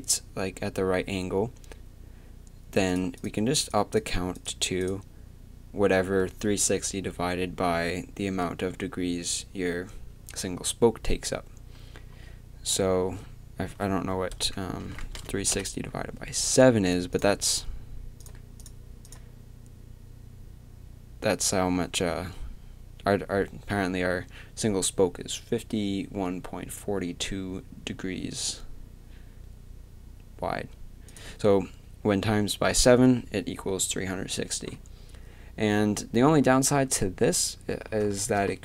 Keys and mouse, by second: 36.5-38.2 middle drag.